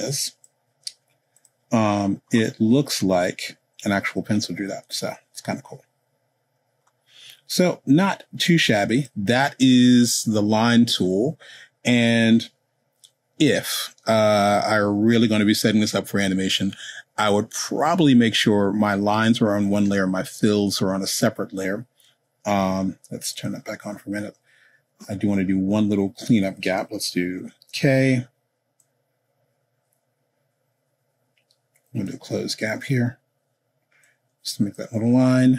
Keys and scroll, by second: 27.7 k.